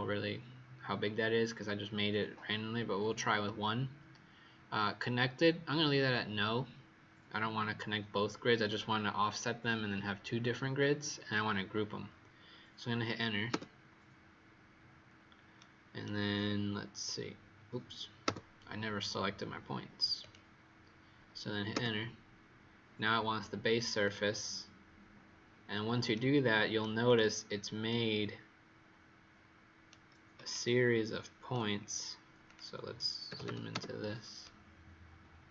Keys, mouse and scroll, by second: 13.4 Return, 15.5 right click, 16.3-18.2 scroll up 3, 18.2 Return, 20.1 click, 21.6 Return, 23.9 click, 26.1 right click, 27.0 click, 27.8 right click, 32.4 click, 33.2 z, 34.4 right click.